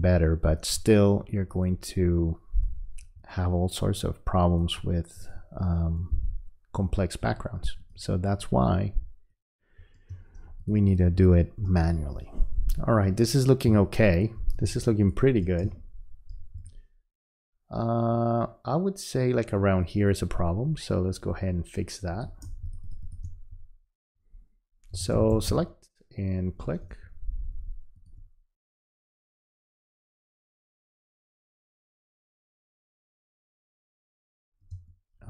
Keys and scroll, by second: 10.1 space, 13.7 space, 34.7 space.